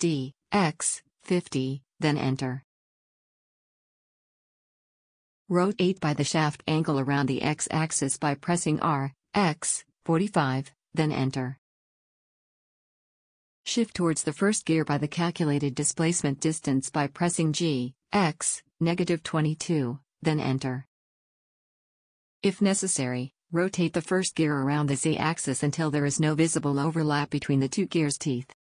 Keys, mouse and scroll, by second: 2.1-3.9 middle drag, 6.7 r, 9.4-11.3 middle drag, 11.5-13.3 middle drag, 15.8 g, 18.9 middle click, 20.2 middle click, 21.4 middle click, 24.9-28.6 middle drag.